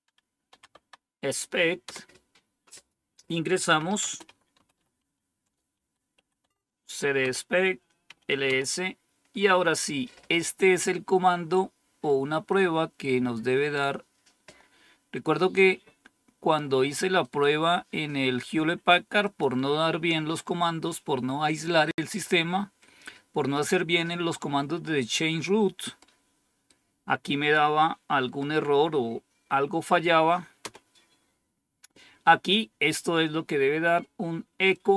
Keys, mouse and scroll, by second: 0.4 e, 0.7 Tab, 1.8 Return, 3.4-7.1 typing, 7.2 Return, 8.2-8.9 typing, 12.4-15.5 drag, 19.2 click, 30.5 Return, 34.6-34.9 drag.